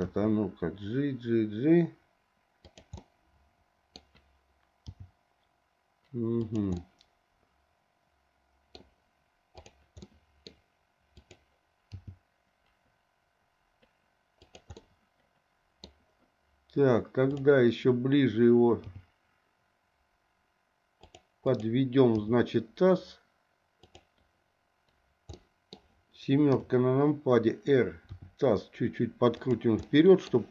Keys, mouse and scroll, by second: 0.1 g, 2.9-3.9 middle drag, 3.9-4.9 scroll down 1, 4.9 g, 6.7-7.8 scroll up 1, 7.8 middle click, 10.0 middle click, 11.2 click, 11.9 g, 14.7-16.1 middle drag, 18.8 g, 21.4 click, 22.2 g, 25.3 middle click, 26.5 KP_7, 28.1 r, 29.8 middle click.